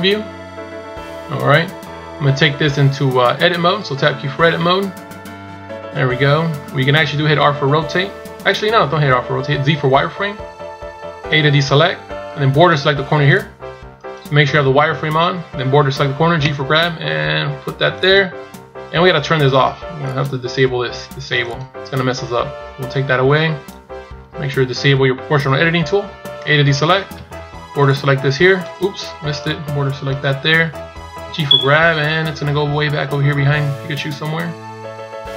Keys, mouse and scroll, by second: 0.9-1.5 scroll up 1, 4.5 Tab, 7.2 Tab, 9.7 z, 10.3-11.3 scroll up 1, 11.3 a, 12.6 b, 20.0 click, 27.0 b, 31.2 g.